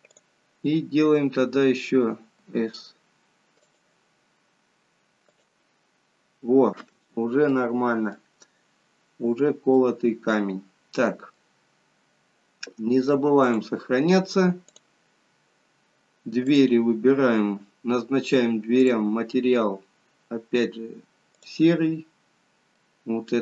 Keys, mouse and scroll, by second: 5.6 click, 7.1-7.6 scroll up 2, 7.6 middle click, 9.4-9.9 scroll down 2, 9.9 middle click, 11.7-12.5 scroll down 1, 12.5 scroll down 1, 13.6 click, 19.0 click, 22.8 middle click.